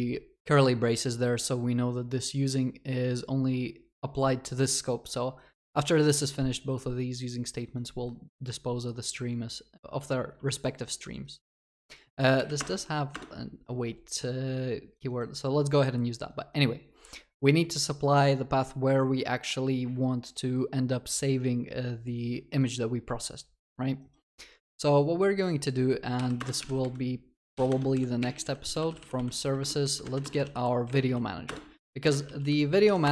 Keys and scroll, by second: 12.6 alt+Return, 29.7 Return.